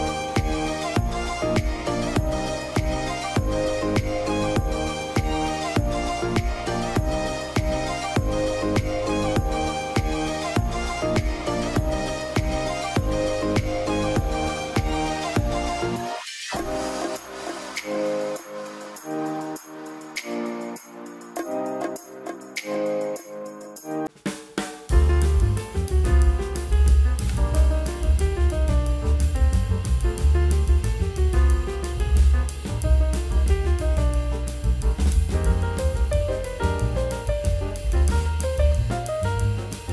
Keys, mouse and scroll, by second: 15.8 double click, 15.8 middle click, 16.3-16.6 scroll down 1, 16.6 middle click, 16.7 scroll up 1, 17.7 middle click, 18.2 alt+middle click, 19.0 scroll up 1, 20.6 alt+middle click, 23.8-25.6 scroll up 1, 27.4 scroll down 1, 28.1 alt+scroll down 1, 29.6 alt+middle click, 37.5-38.2 scroll up 1.